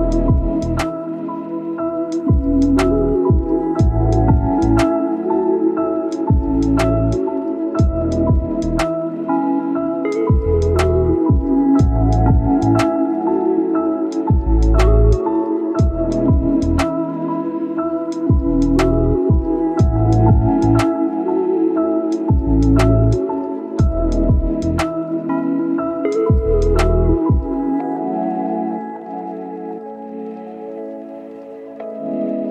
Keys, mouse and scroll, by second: 0.9 right click, 1.1 scroll down 1, 1.4 right click, 1.9 scroll up 1, 2.1 right click, 2.8 scroll down 1, 2.9 scroll up 1, 3.1 right click, 4.2-4.5 scroll up 1, 4.5 click, 5.8-6.4 scroll down 1, 6.4-7.3 scroll up 1, 7.3 click, 8.6-9.0 scroll down 1, 9.1-10.1 scroll up 2, 9.4 click, 10.1 click, 10.8 scroll down 1, 11.0-11.4 scroll up 1, 11.4 click, 13.3 scroll down 1, 13.4 scroll up 1, 13.6 right click, 14.3 scroll down 1, 14.4 scroll up 1, 14.7 right click, 15.1 scroll down 1, 15.2 scroll up 1, 15.4-17.7 right drag, 17.7 scroll up 1, 17.9 right click, 18.1 scroll down 1, 18.2 scroll up 1, 18.4 right click, 19.0 scroll down 1, 19.1-20.2 scroll up 1, 21.2 right click, 21.6 click, 24.3-26.2 right drag, 26.2 scroll up 1, 26.4 right click, 27.0 click, 28.9 scroll down 1, 29.0-29.7 scroll up 2, 29.1 right click, 29.7 click, 29.8 right click, 30.3 click, 30.4 scroll down 1, 30.5 scroll up 1, 30.6-32.5 right drag.